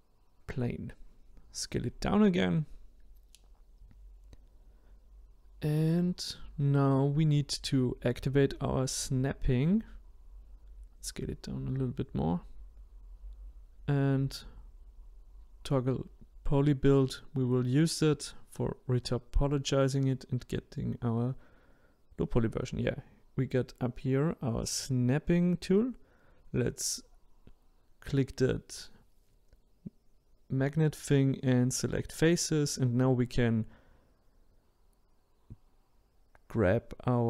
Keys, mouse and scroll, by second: 0.1 click, 2.0 s, 4.7-5.2 scroll up 3, 5.2-7.8 scroll down 1, 7.8 click, 9.9-12.9 drag, 14.2-16.7 drag, 16.7 middle click, 17.6-20.6 scroll down 2, 20.6 scroll down 1, 20.7 click, 22.5-25.5 drag, 25.7-27.4 middle drag, 27.4-30.4 drag, 30.6-31.9 middle drag, 31.9-34.9 drag, 36.8-37.2 drag.